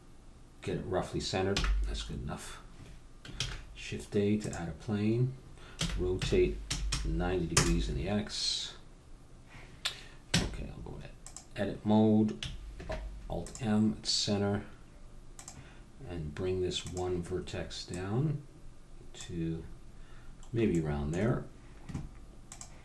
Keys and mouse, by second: 1.6 n, 2.1-4.2 middle drag, 3.3 shift+a, 5.0 middle click, 5.7 r, 10.3 Tab, 12.7 alt+m, 15.4-19.7 drag, 19.7-22.5 middle drag, 22.5-22.8 drag.